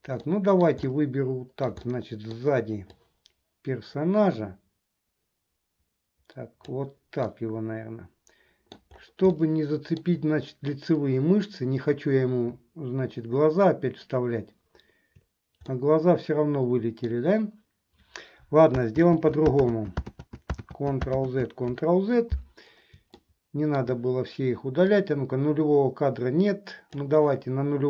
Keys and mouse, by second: 0.4-1.9 middle drag, 2.0 middle click, 3.1-6.9 drag, 7.5-8.9 middle drag, 9.6 shift+middle click, 15.8-17.3 middle drag, 19.1 ctrl+z, 21.4 ctrl+z, 23.3 shift+middle click, 25.0-27.2 drag.